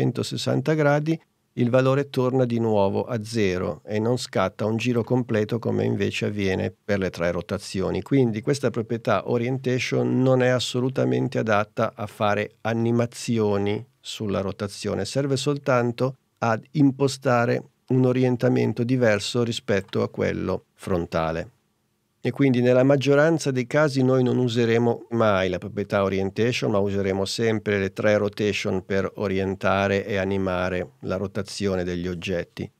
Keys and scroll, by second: 22.9 super+z.